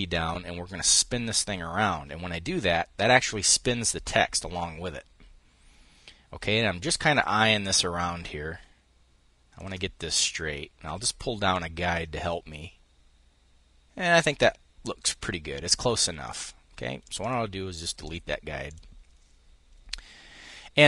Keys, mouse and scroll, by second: 9.8-10.8 ctrl+drag, 11.1-16.4 drag, 16.6 click, 17.6 click, 20.5 click.